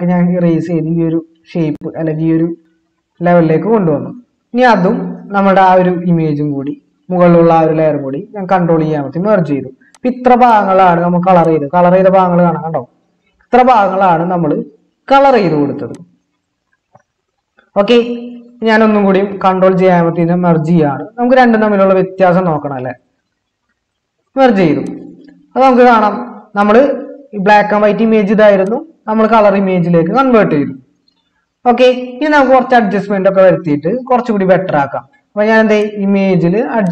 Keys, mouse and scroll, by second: 8.3 ctrl+e, 20.2 ctrl+j, 23.5 ctrl+e.